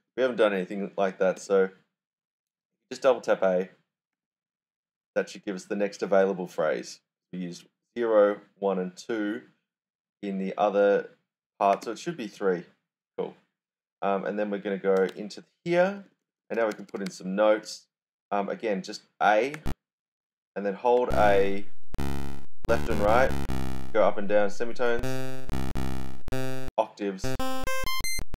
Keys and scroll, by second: 0.0-1.8 typing, 4.2 typing, 11.5-12.2 typing, 14.7-17.5 typing, 18.9-20.0 typing, 21.1-28.3 typing.